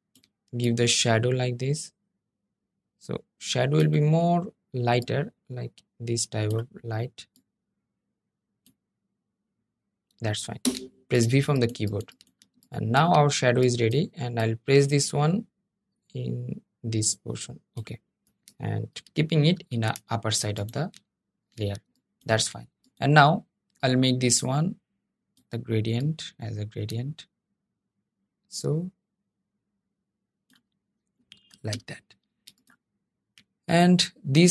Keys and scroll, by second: 19.3 super+}, 31.4 super+{.